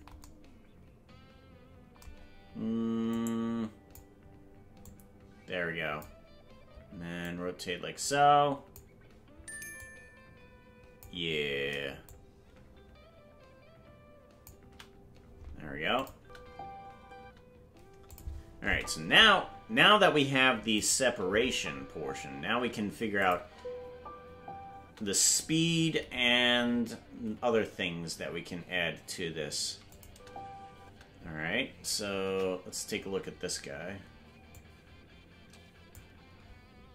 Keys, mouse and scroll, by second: 3.1 click, 4.8-6.0 drag, 7.2-8.7 drag, 9.7-11.0 drag, 12.0-14.4 shift+drag, 15.9 click, 16.1 space, 18.1 click, 18.6 space, 20.7 click, 21.0 space, 23.2 click, 23.4 space, 29.9 click, 30.0 space, 32.2 KP_0, 34.5-35.9 drag.